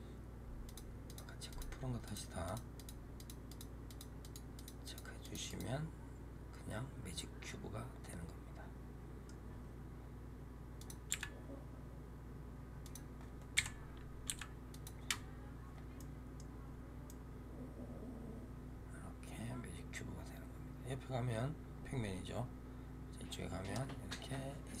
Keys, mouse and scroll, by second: 0.5 click, 0.9 click, 1.4 click, 1.9 click, 2.3 click, 2.6 click, 3.0 click, 3.4 click, 3.7 click, 4.1 click, 4.4 click, 4.7 click, 5.1 click, 5.4 click, 6.2 scroll up 2, 6.5 scroll down 2, 7.0-9.4 middle drag, 9.4-10.7 scroll down 4, 10.7 click, 11.0 g, 13.5 KP_7, 14.2 g, 15.8-16.5 middle drag, 16.5-17.0 scroll up 2, 17.0-24.8 middle drag.